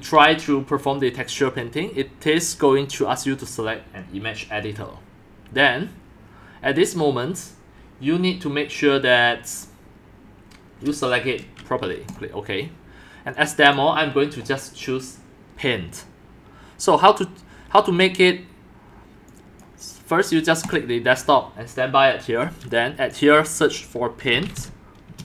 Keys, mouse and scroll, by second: 12.1-16.7 drag, 17.2-18.8 drag, 19.6 click, 21.8-24.2 drag, 24.0-25.1 typing.